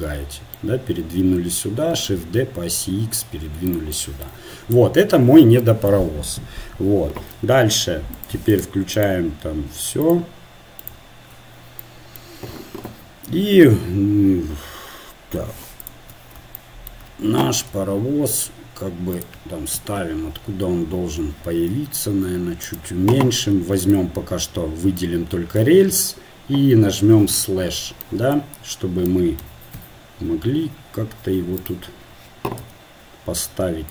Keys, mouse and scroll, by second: 1.9 shift+d, 4.4 Tab, 8.2-12.9 drag, 12.9 KP_7, 16.0-18.2 drag, 17.8 g, 18.2 g, 20.0 KP_1, 21.8 s, 27.5 KP_Divide, 29.9 KP_1, 30.6 KP_3, 32.6 g.